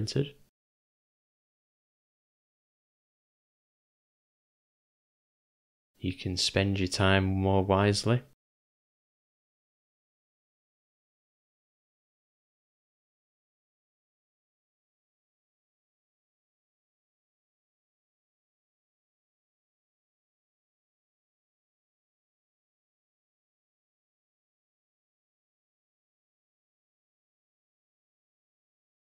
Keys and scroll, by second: 0.6 g, 1.3 ], 1.4 ], 1.6 ], 3.6 [, 3.8 [, 7.4 u, 11.5 j, 19.6 ], 19.9 ], 20.0 ], 24.3 u, 24.9 [.